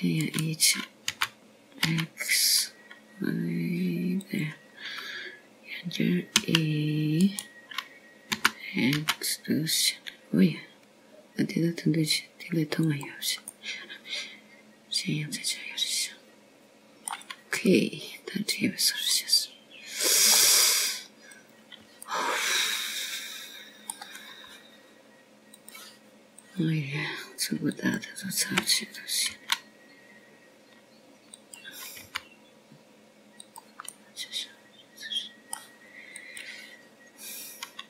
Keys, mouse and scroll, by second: 2.6 e, 4.0 g, 9.2 e, 11.2 g, 16.3 middle click, 20.5 middle click, 24.2 click, 24.9 middle click, 28.4 click, 29.3 click, 30.6 alt+click, 32.2 s, 34.9 g, 36.8 middle click.